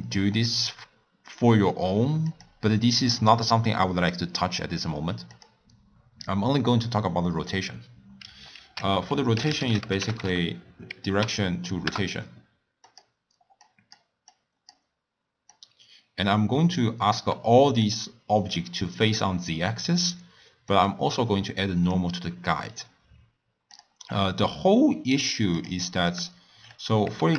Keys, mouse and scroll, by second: 2.4 click, 3.4 click, 5.6 click, 8.6 ctrl+a, 13.6 drag, 14.3 click, 15.5 drag, 17.9 drag, 20.7-23.8 drag, 25.6 click, 26.1 click, 26.7 scroll up 2, 27.2 shift+a.